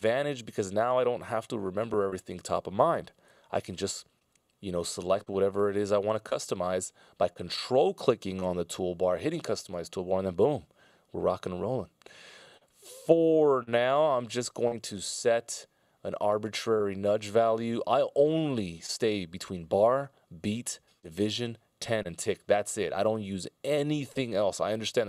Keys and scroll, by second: 3.6 F16.